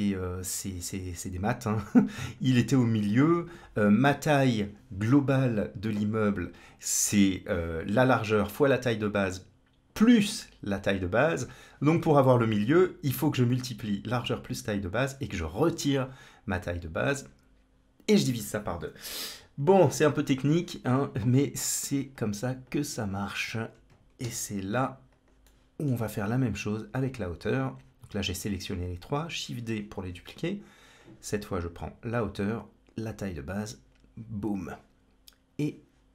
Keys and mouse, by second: 0.3-1.3 drag, 1.7 click, 22.0 click, 22.5 click, 22.9 shift+click, 23.4 shift+click, 24.1 shift+d, 25.3 middle click, 30.8-32.0 drag, 33.4-34.5 drag.